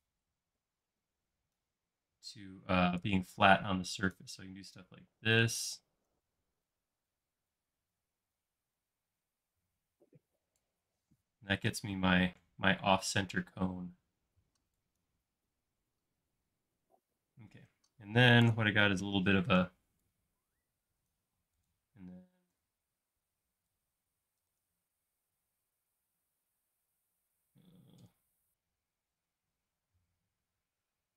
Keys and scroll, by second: 11.2 space, 14.3 e, 16.1 space, 18.3 typing, 19.6 p, 21.4 typing, 22.5 typing.